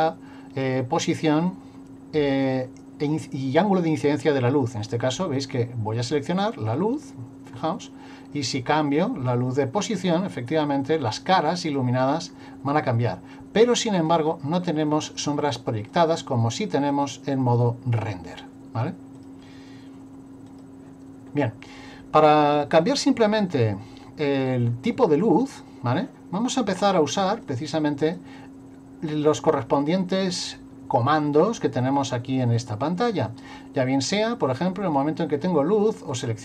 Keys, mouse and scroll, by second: 6.4 right click, 7.5-8.3 scroll down 1, 8.3 click, 10.9 click, 12.7 click, 19.2 click, 27.4 click, 36.1 click.